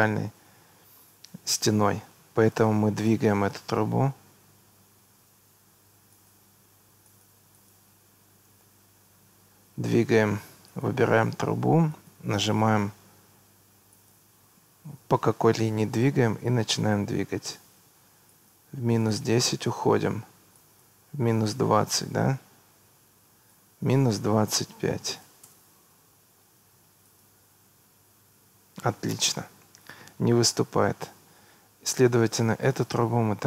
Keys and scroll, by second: 5.0 Escape, 24.5 -, 25.1 2, 25.5 Return.